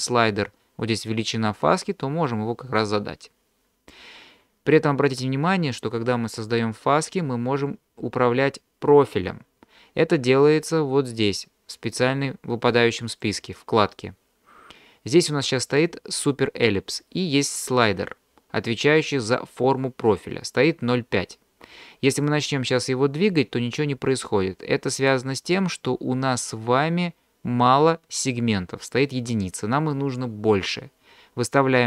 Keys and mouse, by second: 1.4-4.0 drag, 13.2 click, 22.4-25.1 drag.